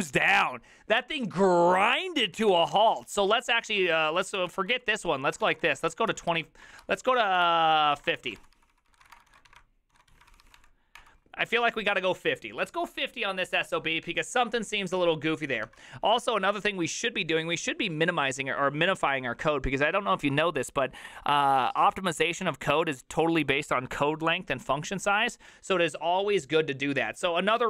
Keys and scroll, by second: 2.1-10.6 typing, 3.1 ctrl+u, 11.0 Return.